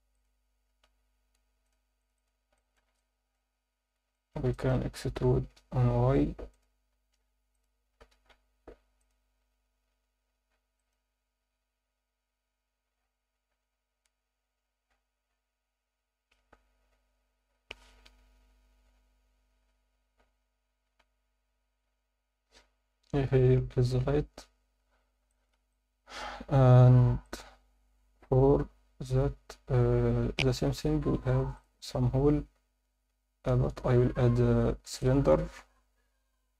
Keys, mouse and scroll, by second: 0.6 scroll up 1, 0.8 a, 1.7 click, 2.2 click, 2.5 alt+shift+middle click, 3.0 ctrl+alt+middle click, 4.1 alt+shift+middle click, 4.5 ctrl+alt+middle click, 5.6 e, 5.8 y, 6.5 click, 6.9 s, 7.5 click, 8.0 e, 8.3 y, 9.0 click, 9.4 s, 10.7 click, 13.5 z, 21.0 Tab, 21.7 z, 22.1 scroll down 1, 24.0-24.8 scroll down 2, 25.2 scroll down 1, 25.3 alt+shift+middle drag, 25.7-26.2 alt+middle drag, 26.3 Tab, 27.0 Tab, 27.2 click, 27.6 Tab, 30.3-30.6 scroll down 2, 30.9 shift+s, 32.5 Tab, 33.1 shift+a.